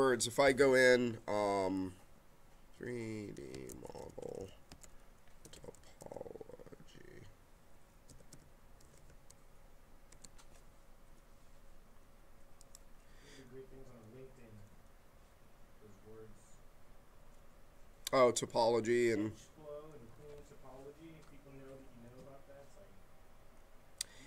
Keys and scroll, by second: 2.7-6.5 typing, 7.8-9.4 typing, 10.1 Return.